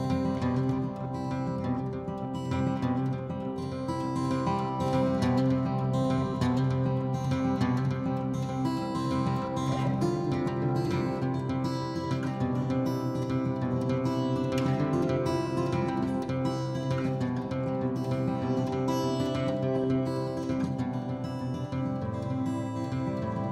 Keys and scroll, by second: 0.2 Escape, 3.9 typing, 5.9-7.7 typing, 10.8 m, 12.3 p, 16.9 ctrl+g, 22.5 BackSpace, 22.7 BackSpace, 22.9 Right, 23.0 Right, 23.1 Right, 23.2 Right.